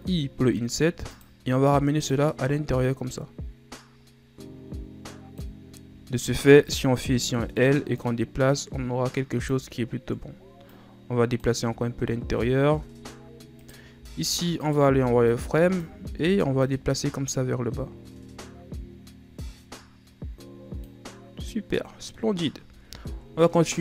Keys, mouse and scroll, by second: 2.2-5.4 drag, 6.8 right click, 7.2 l, 8.1-10.0 drag, 10.0-10.9 ctrl+scroll down 2, 10.9-11.9 drag, 11.9-12.6 shift+scroll down 4, 12.6-13.2 ctrl+scroll down 3, 13.2-13.7 scroll up 1, 13.7 right click, 14.1 z, 14.8 right click, 15.0 b, 16.3 z, 16.8-19.9 drag, 21.3-21.9 scroll down 3, 21.9-22.9 middle drag, 22.9 ctrl+Tab.